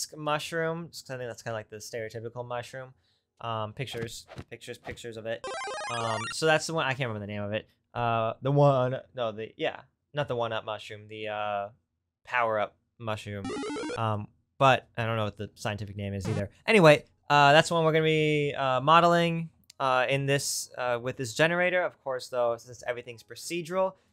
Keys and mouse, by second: 13.8 click, 14.5-17.7 drag, 18.0 click.